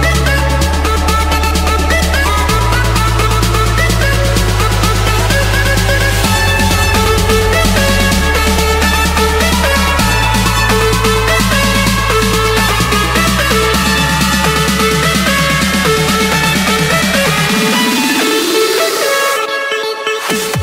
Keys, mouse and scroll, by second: 0.2-3.0 typing, 4.2 Return, 6.5-7.6 drag, 8.9 typing, 9.7 Return, 10.8-13.2 typing, 13.7 Return, 15.0-15.7 typing, 16.5 Return, 17.4 Return, 18.4 Return.